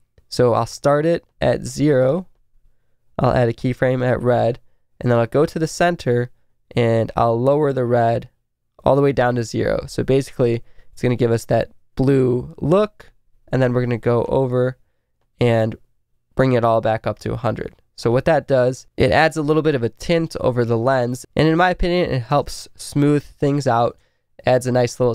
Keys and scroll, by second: 9.7 Left, 10.3 Left, 10.8 Left, 11.2 Right, 12.1 Right, 12.7 Right, 18.7 Right, 19.2 Right, 19.8 Right, 20.4 Right, 21.0 Right, 21.7 b, 22.3 space, 23.9 space.